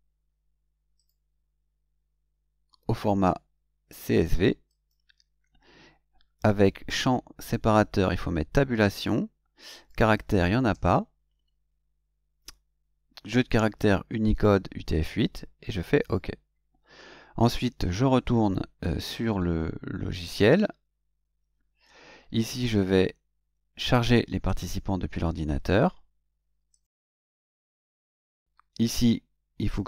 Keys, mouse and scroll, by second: 0.9 click, 4.7 click, 7.6 click, 8.9 click, 9.7 click, 10.7 BackSpace, 16.0 click, 19.4 Tab, 24.4 click, 26.7 click, 29.7 click.